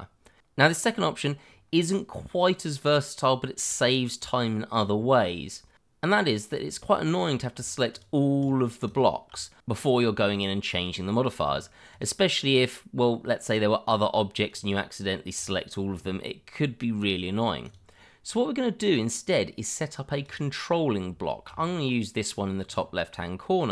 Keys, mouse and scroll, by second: 0.7 shift+middle click, 0.8 middle click, 1.2 shift+middle click, 2.0 scroll up 1, 2.3 shift+middle click, 3.3 shift+middle click, 3.4 middle click, 3.4 shift+middle click, 6.6 click, 7.9 shift+click, 8.1 click, 8.8 shift+click, 9.2 click, 11.9 click, 14.5 click, 17.6 click, 20.2 click, 21.2 shift+middle click, 21.3 middle click, 21.4 shift+middle click, 21.5-22.8 scroll up 1, 22.8-23.1 scroll down 1.